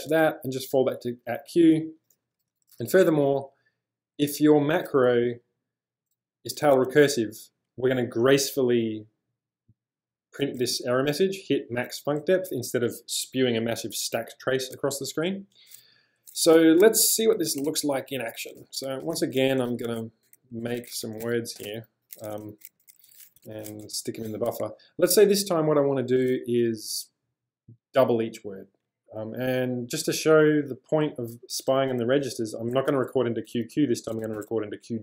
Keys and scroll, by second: 0.1 j, 2.2 j, 2.4 j, 2.5 j, 2.7 j, 16.6-22.3 typing, 34.0-34.9 typing.